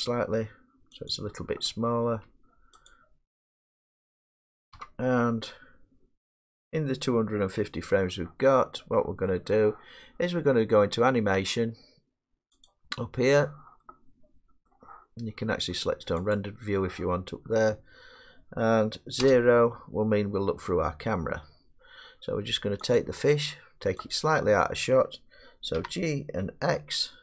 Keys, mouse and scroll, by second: 1.1 click, 1.6-2.1 scroll, 2.1 s, 2.9 click, 4.0 middle click, 4.0 middle click, 4.8 1, 8.8-12.7 middle drag, 12.7-13.8 drag, 14.7 middle click, 16.4 click, 19.2 0, 23.0 click, 24.2 click, 25.8 g, 26.8 x.